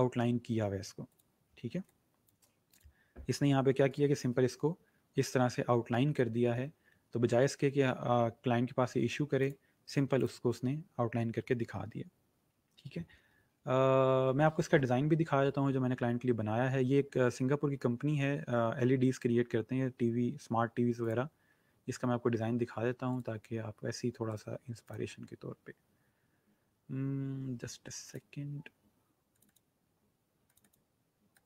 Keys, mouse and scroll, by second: 0.9 click, 1.7 space, 1.8 click, 2.2 space, 2.6 click, 3.6 alt+scroll up 2, 3.8 click, 9.3 click.